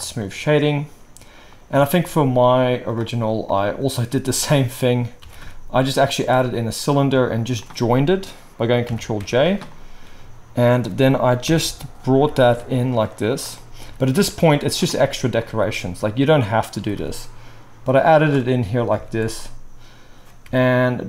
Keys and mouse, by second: 1.8 shift+a, 3.3-12.2 right drag, 5.2 g, 6.2 s, 7.4 shift+click, 7.4 shift+middle click, 8.8 ctrl+j, 9.2 Tab, 11.4 ctrl+l, 12.4-18.1 drag, 12.4 g, 13.8 g, 15.4 s, 16.7 g, 18.1 right click, 18.9-20.4 alt+right drag, 19.0 alt+a, 19.2 click, 19.2 middle click, 20.4 i.